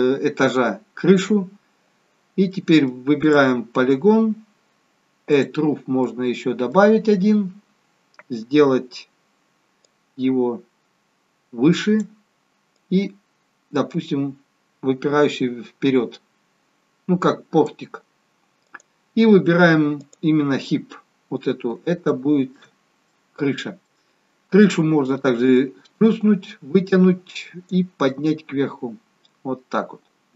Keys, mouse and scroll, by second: 2.5 middle click, 3.2 click, 5.2 click, 6.0 middle click, 9.8 click, 12.7 click, 18.6 click, 20.9-21.7 scroll down 2, 22.1 shift+middle click, 23.1 middle click, 25.5 click, 28.3 click.